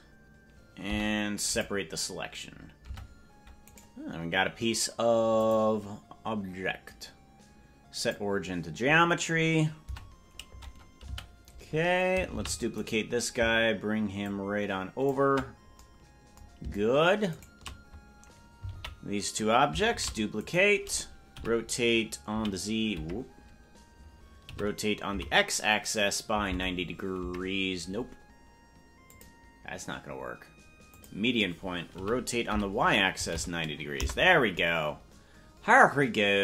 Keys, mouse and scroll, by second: 2.9 Tab, 2.9 p, 3.7 right click, 5.3-8.1 drag, 9.8 Tab, 12.3 a, 12.3 shift+d, 14.2 ctrl+click, 17.3-18.6 shift+right drag, 18.6 ctrl+l, 19.9 shift+d, 21.3 r, 24.4 r, 29.0-31.1 drag, 35.3 r.